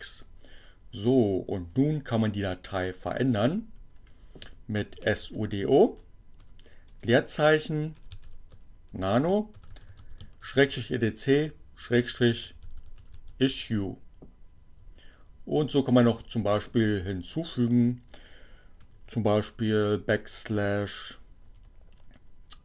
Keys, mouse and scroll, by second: 2.6-3.6 typing, 5.0-11.6 typing, 12.8-13.7 typing, 14.2 Right, 16.6 space, 20.6 BackSpace.